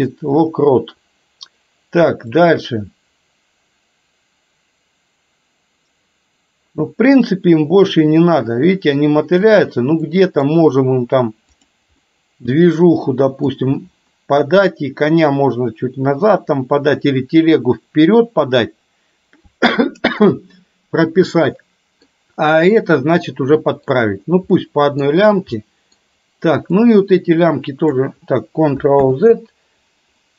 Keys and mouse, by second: 2.5-9.5 drag, 10.2 middle click, 11.7 click, 12.0-13.7 middle drag, 21.5-22.2 middle drag, 23.7 middle drag, 24.7-25.0 middle drag, 25.7-26.0 middle drag, 27.0-28.0 drag, 29.0 ctrl+z.